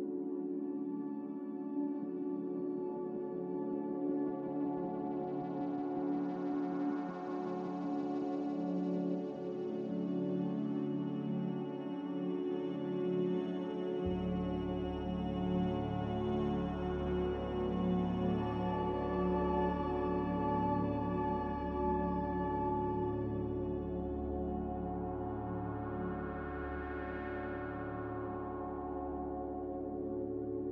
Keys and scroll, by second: 5.3 1, 7.7 1, 23.5 ctrl+z, 27.8 ctrl+z, 28.2 ctrl+z, 29.3 Delete.